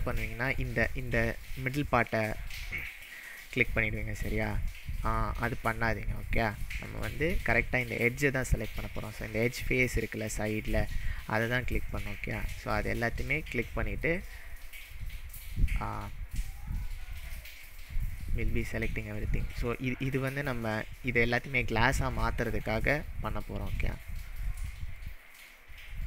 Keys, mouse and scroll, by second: 0.5 click, 6.4 click, 12.0 shift+click, 12.7-13.1 shift+middle drag, 14.9 shift+click, 15.2-15.7 shift+middle drag, 17.1 shift+click, 17.6-18.1 shift+middle drag, 20.0 shift+click, 22.7-23.1 shift+middle drag, 24.5 shift+click, 25.1-25.5 shift+middle drag.